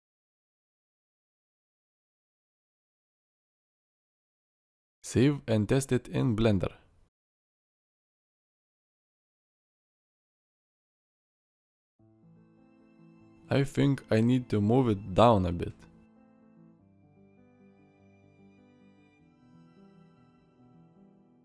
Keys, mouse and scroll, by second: 9.3 alt+r, 10.2-11.0 middle drag, 11.5 middle drag, 12.7 middle click, 17.3-18.3 middle drag.